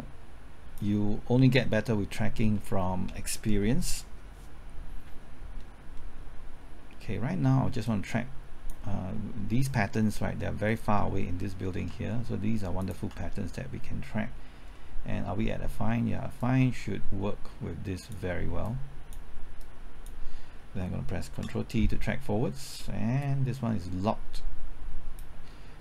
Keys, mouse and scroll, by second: 1.5 middle click, 5.5-5.9 scroll down 1, 5.9 middle click, 6.3-7.8 scroll up 1, 7.8-9.2 drag, 10.1 scroll up 1, 10.3 middle click, 10.8-11.2 scroll up 1, 12.7 ctrl+click, 14.7 middle click, 16.3-18.2 drag, 21.5 ctrl+t, 23.2-25.2 drag.